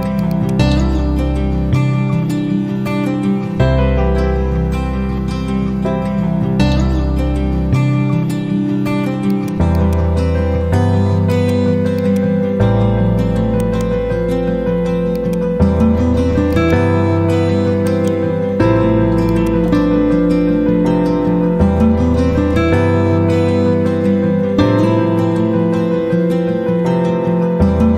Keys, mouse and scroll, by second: 0.5 ctrl+a, 9.2 click, 10.3 F4, 11.2 click, 13.5 right click, 15.0 click, 17.8 right click, 19.2 click, 20.1 F4, 20.9 F9.